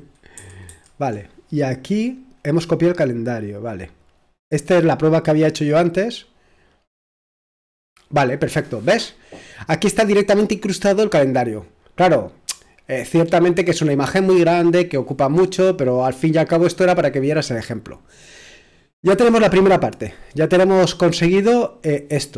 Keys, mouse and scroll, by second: 0.1-1.2 typing, 3.6-7.2 drag, 21.1-22.3 drag.